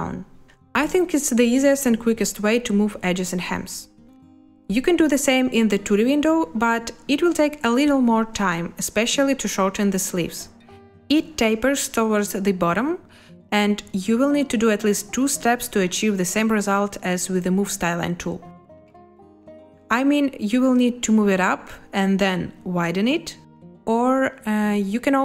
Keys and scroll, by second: 10.6 space, 12.8 space, 20.1 z, 24.0 Escape.